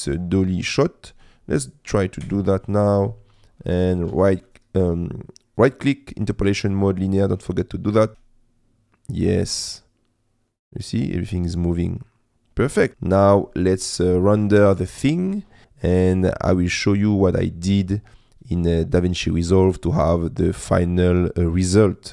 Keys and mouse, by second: 2.2 i, 4.1 a, 4.4-7.2 drag, 7.9 click, 8.1 space.